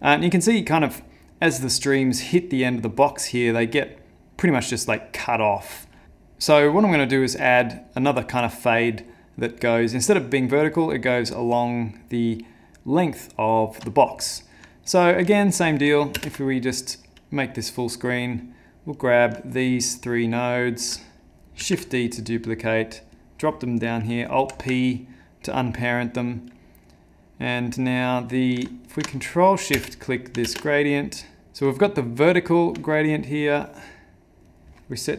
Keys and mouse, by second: 13.6 middle click, 14.1 middle click, 14.7 ctrl+middle click, 14.8 ctrl+middle click, 15.3 middle click, 16.2 ctrl+space, 16.6 middle click, 17.9 click, 18.9 click, 19.5 shift+click, 19.7 shift+click, 21.6 shift+d, 24.4 alt+p, 25.1 middle click, 25.9 click, 25.9 click, 26.6 middle click, 28.9 ctrl+shift+click, 29.7 space, 30.6 ctrl+space, 31.7 shift+middle click, 33.7 middle click, 34.5 click.